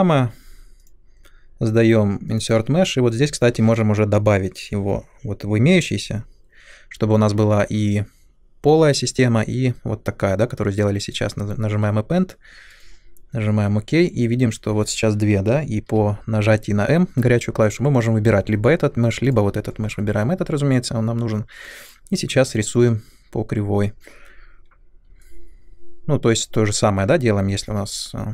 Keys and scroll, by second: 15.8 m.